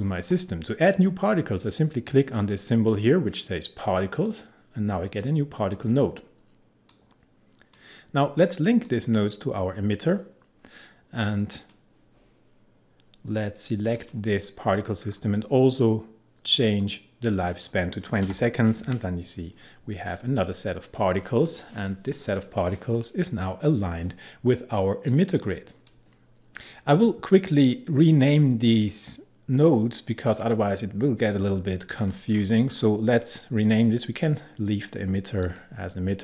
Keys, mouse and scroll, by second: 4.2-11.6 drag, 14.0 click, 15.0-16.0 scroll down 1, 17.5 click, 18.3 2, 20.1-23.4 drag, 25.1-26.9 drag, 31.6-34.3 scroll up 1, 34.3 click.